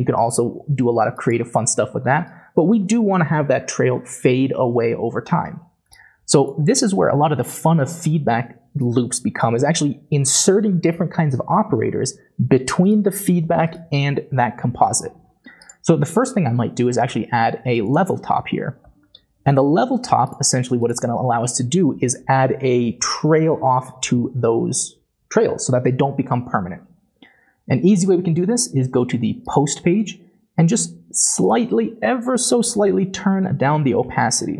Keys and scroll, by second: 18.6-18.9 typing, 34.0 0.